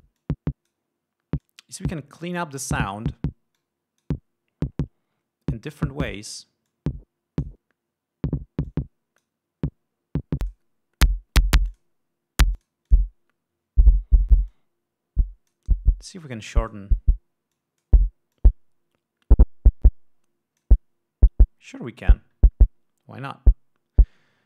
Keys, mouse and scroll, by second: 0.7-1.4 drag, 2.0-3.1 drag, 4.1 click, 6.4-7.1 drag, 7.2-8.2 drag, 9.2-10.0 drag, 11.0 click, 12.3 click, 13.1 click, 13.4 click, 15.0-16.2 drag, 16.7-17.5 drag, 18.1-18.6 drag, 18.9-21.3 drag, 22.2 click.